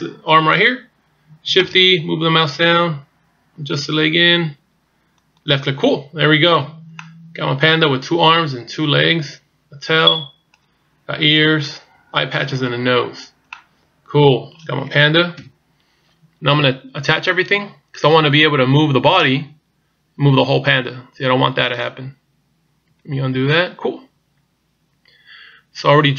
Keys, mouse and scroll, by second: 0.4 right click, 1.7 shift+d, 6.6-7.0 scroll down 1, 7.0 middle click, 12.7-13.1 scroll up 2, 13.1-13.7 scroll down 4, 13.5 middle click, 15.4 KP_1, 16.3-16.6 scroll up 2, 18.1 right click, 19.2 click, 23.2 ctrl+z, 24.6-25.4 scroll up 1.